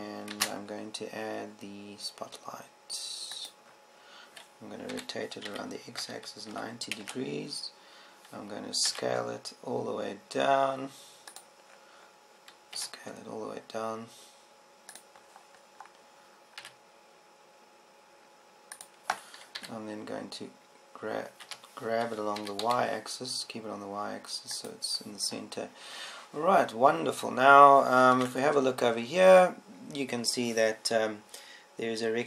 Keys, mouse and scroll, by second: 1.9 shift+a, 6.5 r, 10.5 s, 13.3 click, 14.3 s, 15.1 s, 16.7-19.1 drag, 19.1 s, 20.6 click, 21.3 g, 24.1 g, 26.2 click, 29.7 ctrl+Up.